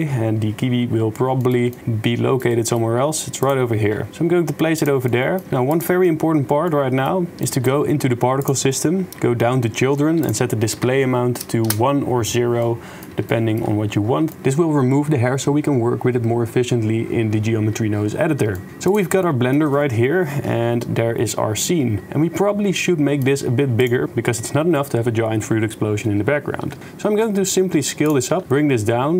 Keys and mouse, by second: 1.3-2.4 shift+middle drag, 2.5 middle click, 4.1 g, 5.2 click, 5.4 middle click, 5.5 g, 6.7 middle click, 7.3 shift+middle click, 10.4-11.7 drag, 12.6 middle click, 13.2 shift+middle click, 14.2 shift+middle click, 18.6 shift+click, 19.3 click, 22.2 click, 22.4 middle click, 26.6 s, 28.4 s.